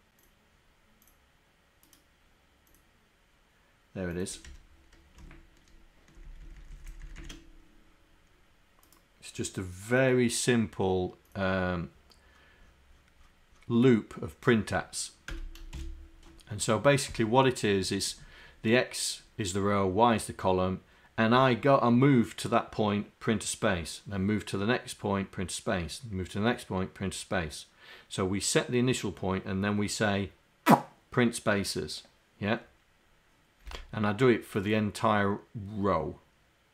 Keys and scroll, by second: 4.5 Home, 5.3 shift+Down, 6.3 shift+Down, 6.8 shift+Down, 7.1 shift+Down.